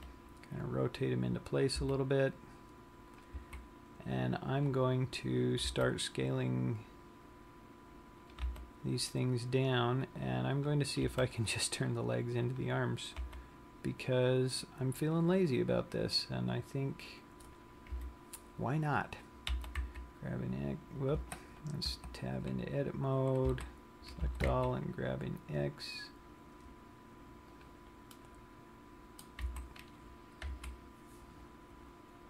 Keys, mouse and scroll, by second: 0.4 r, 2.2 click, 2.3 g, 4.1 click, 4.3 z, 5.2-5.5 scroll up 2, 6.4 s, 9.1 click, 9.1 g, 11.3 click, 11.6 r, 13.2 click, 13.7 g, 15.5 click, 18.0 scroll down 1, 18.2 KP_1, 20.1 g, 22.5 Tab, 24.0 a, 24.6 g, 28.2 click, 28.8 middle click, 29.7 z, 30.8 KP_3.